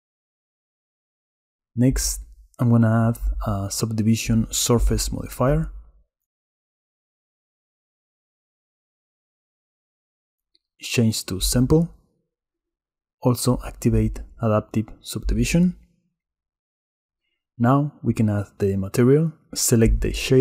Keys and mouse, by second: 3.5-9.8 drag, 11.7 click, 13.7 click, 18.9 click.